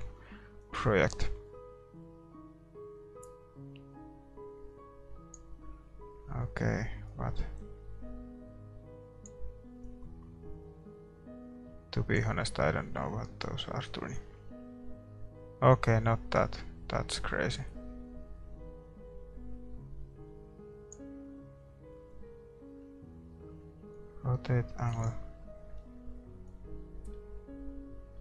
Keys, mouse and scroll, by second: 7.5-11.9 drag, 13.8-15.2 drag, 24.4-28.2 drag.